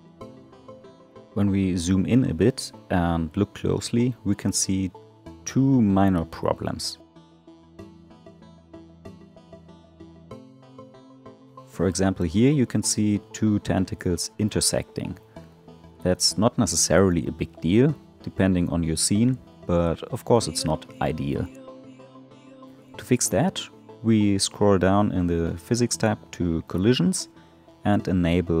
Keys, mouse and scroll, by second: 0.7 click, 1.4-3.6 middle drag, 3.6 click, 4.1 right click, 5.8 click, 6.9-9.9 middle drag, 12.0 alt+middle click, 12.6-13.4 scroll up 7, 13.4-18.9 middle drag, 18.9-20.0 scroll up 7, 20.0-20.8 middle drag, 20.8 click, 23.2-25.1 scroll down 17, 25.1 scroll up 1, 25.2 scroll down 1, 26.4-26.8 drag, 26.8-28.6 scroll down 6.